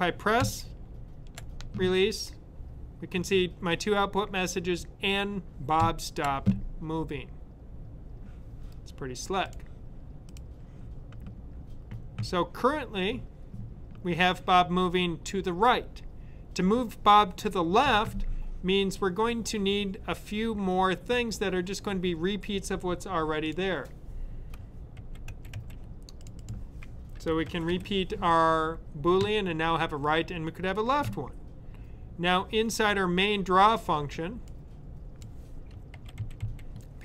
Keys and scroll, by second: 0.3 Right, 5.7 Right, 24.7 super+c, 25.0-28.1 typing, 35.8-36.8 typing.